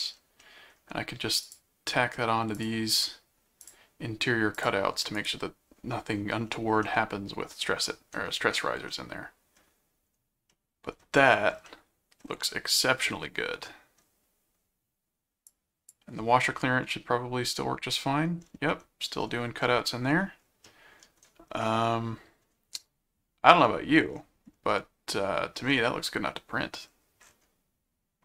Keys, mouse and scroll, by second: 0.4 middle click, 1.4 click, 2.5 click, 3.6 click, 4.5 click, 5.4 right click, 6.8-8.1 middle drag, 8.9 middle click, 10.5 middle click, 11.7 middle click, 12.8-14.0 middle drag, 15.5 click, 16.9-18.2 middle drag, 18.7 middle click, 20.6 middle click, 21.6 middle click, 24.7 middle click.